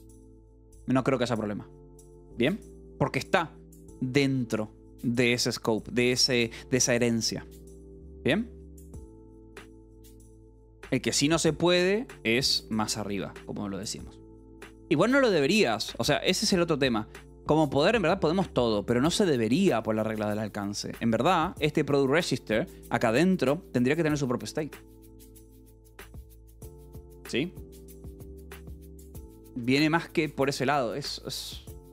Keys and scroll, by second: 0.6 k, 2.9 shift+v, 3.0 Escape, 11.6-14.0 typing, 17.8 j, 18.5 Escape, 20.9 j, 21.9 j, 22.6 Escape, 22.8 k, 23.6 j, 29.3-31.9 typing.